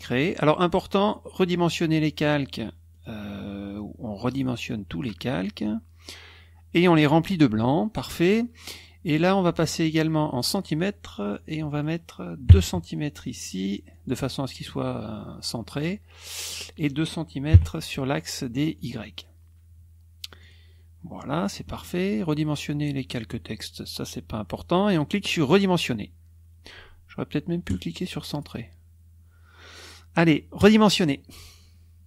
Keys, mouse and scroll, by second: 2.9 click, 4.2 click, 8.6 click, 10.3 click, 11.5 click, 12.4 KP_2, 13.3 click, 13.9 click, 16.5 click, 17.5 KP_2, 18.7 click, 20.4 click, 27.6 click, 30.5 click.